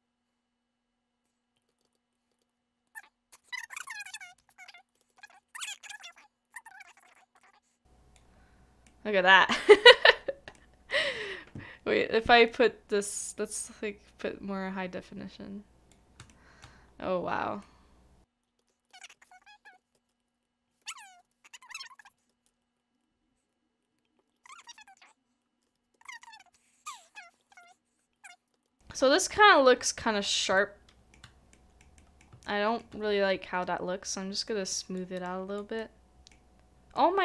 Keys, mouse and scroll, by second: 1.7 shift+middle click, 1.9 shift+middle click, 2.3 shift+middle click, 2.5 middle click, 3.5 shift+middle click, 4.8 shift+middle click, 5.1 shift+middle click, 5.1 shift+middle click, 7.1 shift+middle click, 7.3 shift+middle click, 8.8 middle click, 9.6 scroll up 1, 10.5 middle click, 16.1 middle click, 16.3 shift+middle click, 16.7 scroll down 1, 17.3-17.6 scroll up 1, 17.6 scroll down 1, 17.6 middle click, 18.4 scroll up 1, 18.6 shift+middle click, 18.8 middle click, 19.0 shift+middle click, 19.7 typing, 20.8-21.6 typing, 23.5 right click, 24.3 scroll down 1, 24.5 shift+middle click, 27.3 s, 27.4 shift+middle click, 27.5 shift+click, 27.7 shift+middle click, 28.2 middle click, 28.6 shift+middle click, 28.9 scroll up 1, 28.9 scroll down 1, 29.3 scroll up 1, 29.4 scroll down 1, 29.7-30.5 scroll up 1, 30.5 shift+middle click, 31.5 middle click, 32.4 shift+middle click, 35.8 middle click.